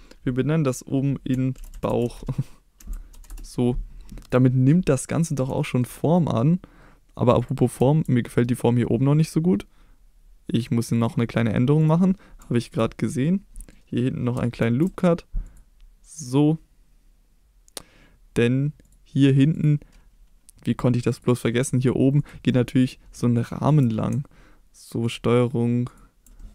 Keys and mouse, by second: 4.9 middle click, 5.6 shift+middle drag, 7.4 click, 7.8 Tab, 11.0 click, 12.5 shift+middle click, 13.0 middle click, 13.6 middle click, 14.6 ctrl+r, 18.9 click, 19.5 click, 21.1 click, 23.4 ctrl+click, 25.0 ctrl+click, 25.9 ctrl+click, 26.4 middle click.